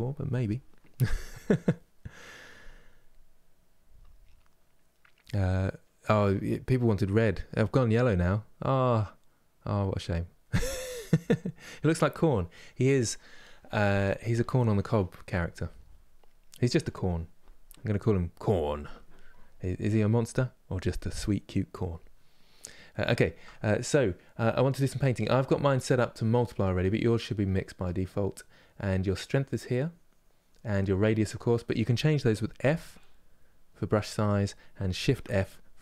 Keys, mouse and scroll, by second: 12.3-27.2 middle drag, 27.2-32.3 drag, 32.3 f, 34.8 shift+f.